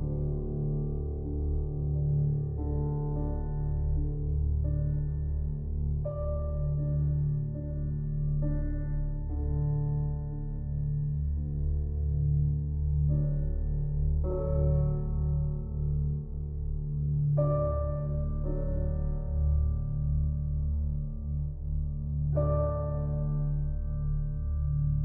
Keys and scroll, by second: 21.0 ctrl+c, 23.0 ctrl+v, 23.9 ctrl+t.